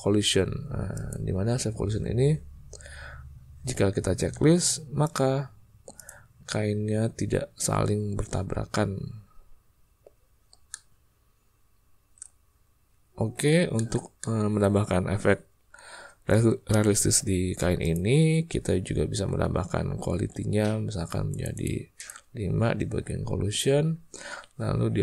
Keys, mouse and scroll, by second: 0.9 click, 5.0 click, 10.7-13.6 middle drag, 13.8 shift+middle click, 14.2-14.7 middle drag, 16.3 space, 21.5 click, 21.9 click.